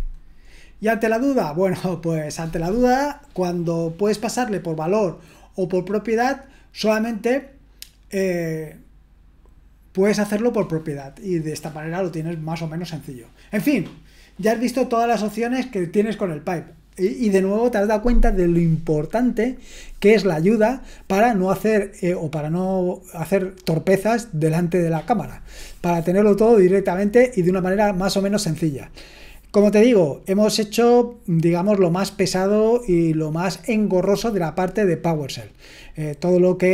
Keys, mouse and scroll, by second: 1.2-2.1 scroll down 1, 2.1-36.7 scroll down 1.